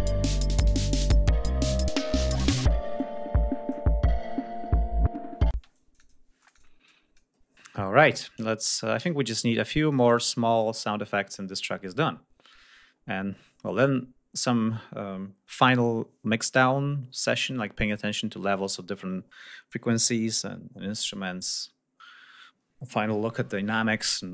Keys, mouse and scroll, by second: 2.7 click, 5.3 space, 5.5 click, 6.2 click, 6.6 click, 8.5 ctrl+click, 9.6 click.